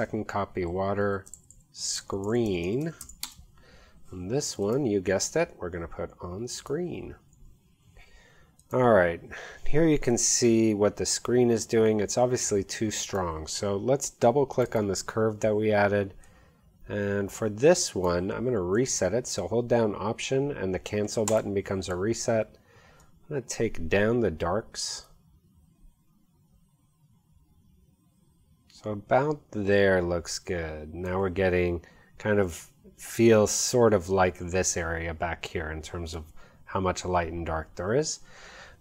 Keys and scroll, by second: 1.0 Right, 1.4 alt+shift+Left, 2.0-3.5 typing.